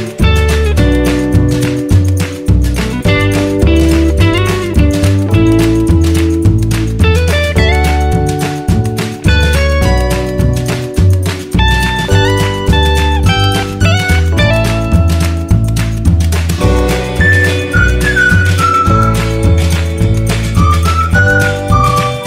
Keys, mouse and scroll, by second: 4.4 typing, 5.7 0, 16.3-17.5 drag, 20.3 click, 21.6 click.